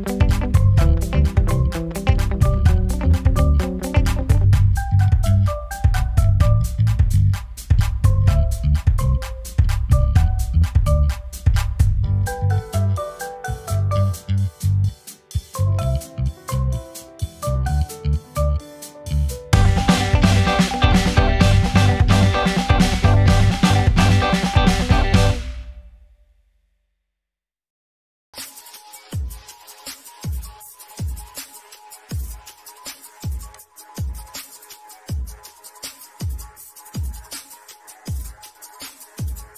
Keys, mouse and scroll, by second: 4.1 scroll up 1, 5.2 click, 5.8 scroll down 1, 8.2 click, 14.4 click, 20.0 click, 22.4 click, 25.0 click, 32.8 click, 38.1 click.